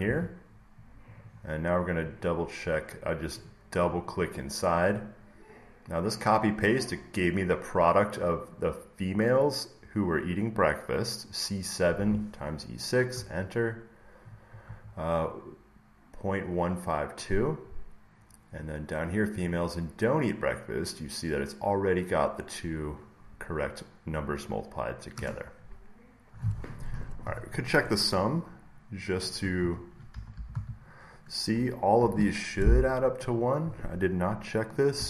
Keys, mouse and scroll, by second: 1.0 click, 1.2 click, 1.9 click, 2.1 click, 3.3 click, 3.8 click, 4.0 click, 4.1 click, 13.0 Return, 14.2 click, 18.5-21.6 drag, 25.0 Return, 29.5 Down, 29.8-32.4 typing, 33.3-35.0 drag, 34.9-35.0 typing.